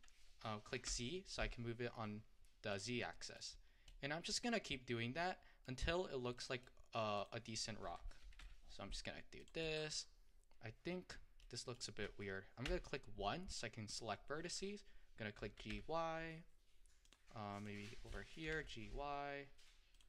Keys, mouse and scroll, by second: 3.1 middle click, 3.6-4.0 scroll up 2, 4.0-6.3 middle drag, 6.3 scroll down 2, 6.4 middle click, 7.2 click, 8.2 g, 9.7-12.7 middle drag, 12.7 1, 13.9 click, 15.4 g, 17.6 click, 18.5 g.